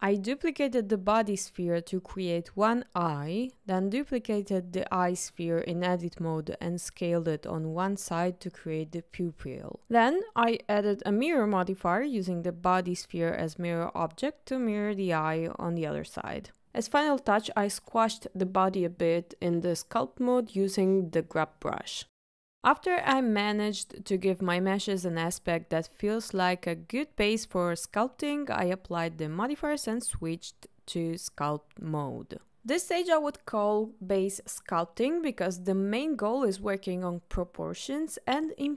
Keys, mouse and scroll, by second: 0.2 click, 0.5 shift+d, 0.8 right click, 1.2 s, 1.6 click, 1.9 KP_3, 2.1 click, 2.9 click, 3.4-5.6 typing, 3.5 right click, 4.1 click, 5.2 click, 5.6 ctrl+z, 5.9 click, 7.5 s, 7.6 y, 8.4 click, 8.7 KP_1, 9.4 click, 9.8 click, 9.8 shift+middle click, 9.8 KP_1, 12.8 click, 16.6 click, 16.6 scroll down 3, 17.6 click, 18.4 scroll up 1, 18.7 click, 19.1 click, 19.9 click, 20.7 click, 21.2 click, 22.0 click, 22.5 click, 23.1-24.0 middle drag, 24.2-26.2 ctrl+middle drag, 26.5-27.6 ctrl+middle drag, 27.9 shift+middle click, 28.4 ctrl+shift+middle click, 28.7 click, 29.2-30.4 drag, 30.4 middle click, 31.2 click, 31.8 middle click, 32.2 click, 32.3 ctrl+middle click, 32.7 KP_1, 33.4 click, 33.8 click, 34.0 click, 34.2 click, 34.4 click, 34.9 ctrl+z, 35.0 ctrl+z, 35.0 click, 35.2 shift+middle click, 35.4 click, 35.6 click, 35.7 middle click, 36.1 click, 36.2 click, 36.4 click, 36.5 middle click, 37.6 click, 38.2 ctrl+shift+middle click.